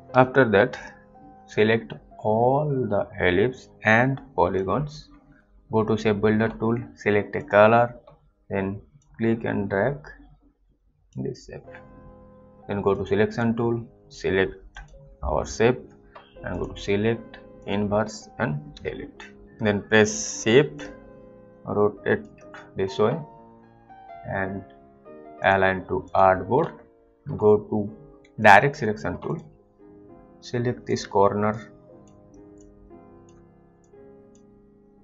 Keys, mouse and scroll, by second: 0.0 click, 0.7 click, 1.1 click, 5.3 ctrl+z, 7.4 click, 9.2 click, 13.0 click, 13.3 double click, 14.8 click, 18.7 Delete, 21.0 shift+click, 25.4 click, 27.0 alt+click, 28.3 alt+click, 28.4 click, 30.7 click, 31.8 shift+click, 32.8 click, 34.1 click.